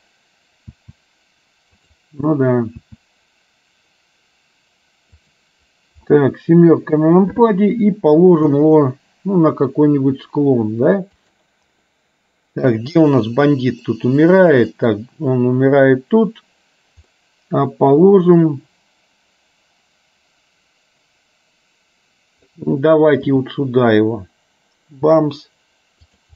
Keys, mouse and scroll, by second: 0.8 s, 6.0 KP_7, 8.6 r, 12.0 middle click, 14.1-15.1 middle drag, 17.2-22.6 middle drag, 23.5 g.